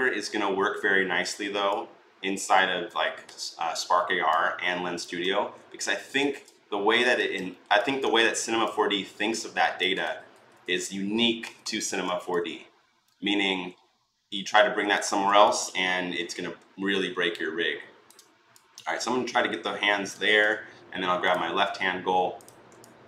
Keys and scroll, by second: 3.0 ctrl+z, 5.2 ctrl+z, 5.6 ctrl+z, 6.0 ctrl+z, 9.8 ctrl+z, 10.1 ctrl+z, 10.4 ctrl+z, 11.2 ctrl+z, 11.4 ctrl+z.